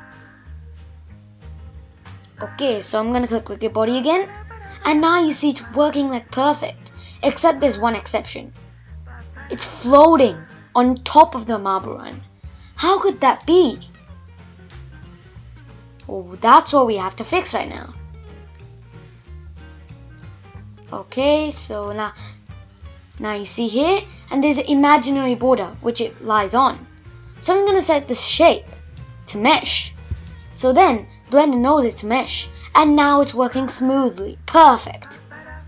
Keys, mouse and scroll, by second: 0.9-2.3 drag, 2.3 space, 3.2 scroll up 2, 3.4-6.1 middle drag, 6.1-7.0 scroll up 4, 7.0-8.4 middle drag, 8.4-9.5 scroll down 2, 9.5 shift+Left, 10.5-10.9 scroll up 4, 10.9-13.9 middle drag, 13.9 space, 14.8-19.1 middle drag, 19.4 click, 20.7 Tab, 21.2 Tab, 24.3 shift+Left, 25.4-25.9 scroll down 1, 26.7-28.7 drag, 28.7 space, 28.8-29.8 scroll down 1, 29.8-32.8 middle drag, 33.8 space, 34.1 click, 35.4 scroll down 1.